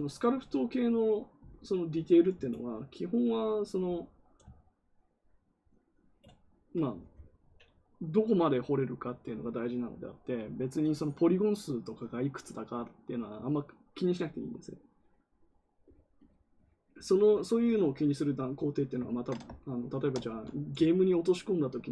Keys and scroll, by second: 20.2 ctrl+z.